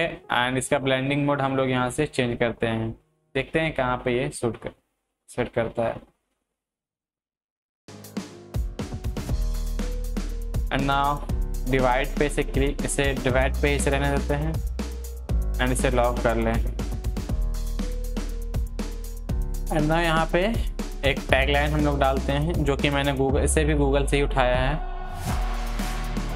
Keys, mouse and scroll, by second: 13.8 click, 13.8 click, 21.7 click, 22.7 ctrl+v, 23.9-26.3 drag.